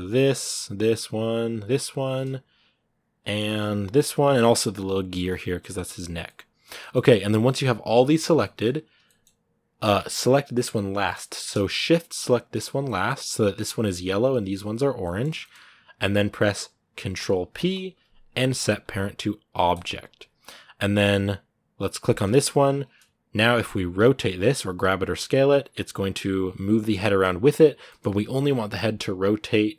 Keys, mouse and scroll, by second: 2.1 g, 3.0 middle click, 3.6 shift+right click, 3.8 g, 4.9 shift+right click, 5.1 g, 6.1 middle click, 6.4 scroll down 2, 6.6 middle click, 6.8 g, 8.2 shift+middle click, 8.4-8.8 scroll up 1, 8.8-12.2 middle drag, 12.2 shift+right click, 12.6 middle click, 12.9-14.8 scroll up 1, 14.8-19.6 middle drag, 19.6 ctrl+p, 21.9 right click, 22.6 scroll down 2, 23.3-23.8 scroll up 1, 23.8 g, 27.6-29.7 middle drag.